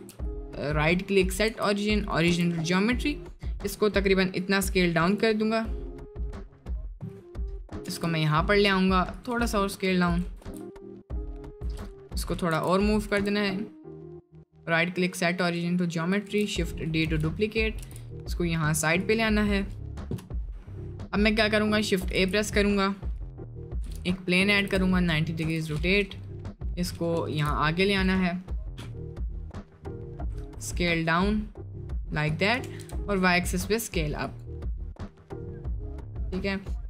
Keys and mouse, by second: 0.2-1.4 drag, 1.4 d, 2.1 click, 2.3 s, 7.8 g, 9.3 s, 10.4 g, 11.6 Tab, 12.5 g, 13.2 Tab, 14.1-15.5 drag, 16.3 shift+d, 16.8 f, 17.1 t, 17.8 g, 20.1 Left, 22.1 shift+a, 23.8 r, 24.5 r, 26.1 click, 26.6 click, 27.3 g, 30.4 s, 32.6 s.